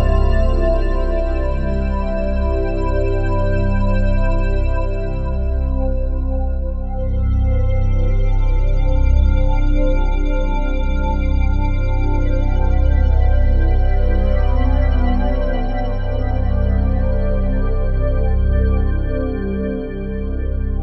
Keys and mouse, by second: 2.5 click, 4.3 click, 5.8 click, 9.4 click, 10.1 click, 12.1-13.5 typing, 14.9-17.9 typing, 16.1 click, 19.2-20.8 drag.